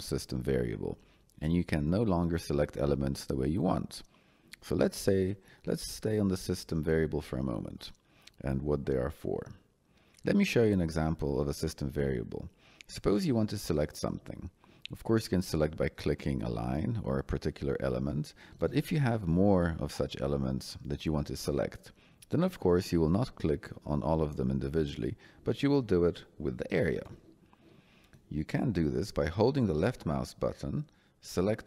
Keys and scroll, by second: 16.4 Escape, 19.1 Escape.